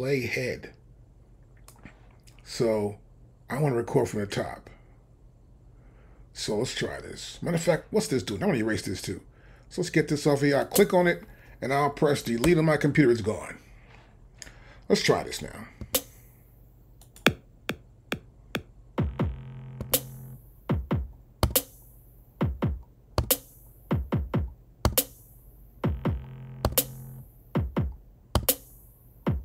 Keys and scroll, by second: 12.4 BackSpace, 15.8 c, 19.8 c, 21.4 c, 23.2 c, 24.9 c, 26.7 c, 28.4 c.